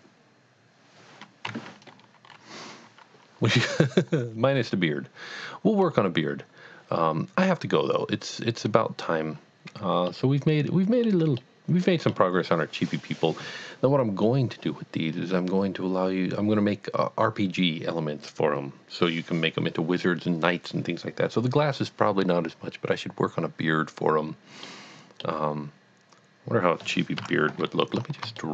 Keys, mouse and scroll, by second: 1.5 KP_1, 5.8 scroll up 1, 9.3 scroll up 1, 9.4-9.9 scroll down 1, 10.0 shift+middle click, 24.6 middle click, 24.8 middle click, 27.2 KP_1, 28.0 scroll up 1, 28.4 shift+middle click.